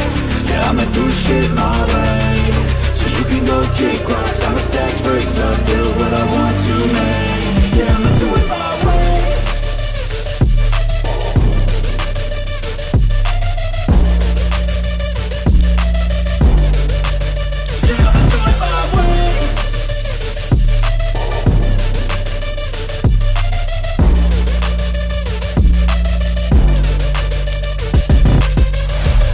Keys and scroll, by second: 5.7 ctrl+d, 9.9 ctrl+t.